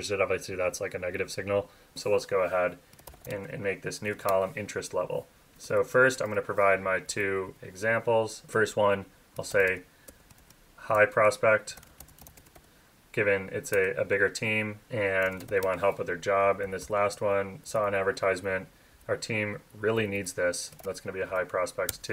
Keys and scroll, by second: 0.2 Up, 1.2 Right, 1.9 Up, 4.2 Return, 6.7 Up, 6.8 Down, 7.4 Up, 13.7 Return, 15.6 Return, 16.1 super+Left, 16.6 super+Left, 17.1 Right, 17.6 Left, 17.8 Right, 18.9 Left, 19.9 Right, 21.9 Tab.